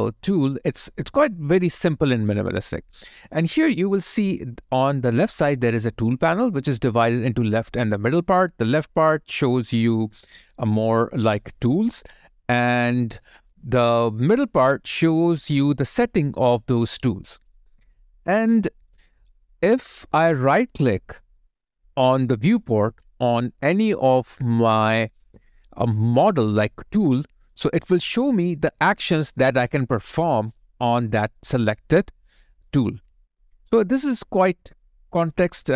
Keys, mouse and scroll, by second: 20.5 alt+click, 27.2 right click.